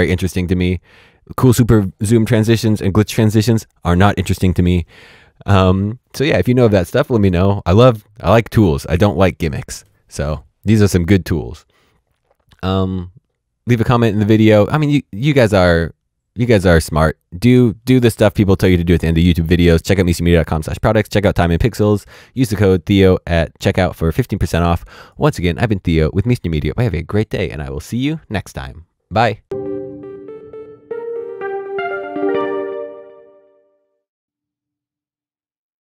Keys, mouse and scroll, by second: 24.9 click.